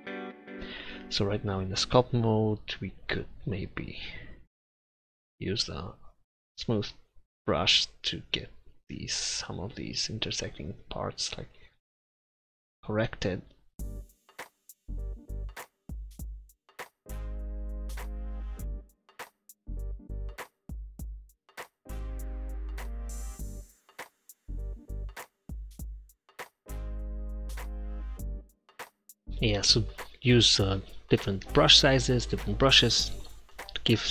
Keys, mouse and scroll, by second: 0.0 Tab, 1.8 click, 5.3 click, 7.0-8.8 drag, 9.0 middle click, 9.2 middle click, 9.5 middle click, 10.7-12.5 drag, 12.5 middle click, 12.9-13.9 drag, 14.1 click, 15.1 click, 15.5 middle click, 15.9 click, 16.0-17.7 middle drag, 16.1 click, 16.6 click, 17.5 f, 17.7 click, 18.2-19.9 middle drag, 19.9 click, 20.4 click, 21.0 click, 21.6-22.7 drag, 22.0 ctrl+z, 22.2 ctrl+z, 22.5 ctrl+z, 22.7 ctrl+z, 22.8-25.6 drag, 25.6 f, 26.0 click, 26.5 ctrl+z, 27.9-34.1 drag, 33.0 f.